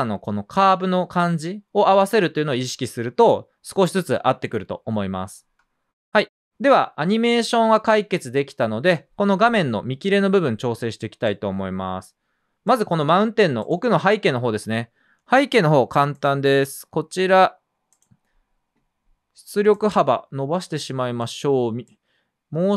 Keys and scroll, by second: 0.9 space.